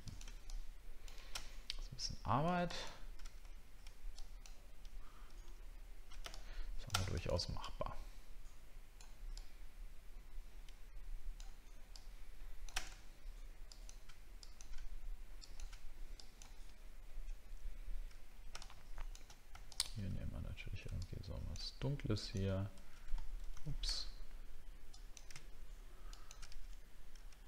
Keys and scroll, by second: 16.6-16.9 alt+scroll down 1.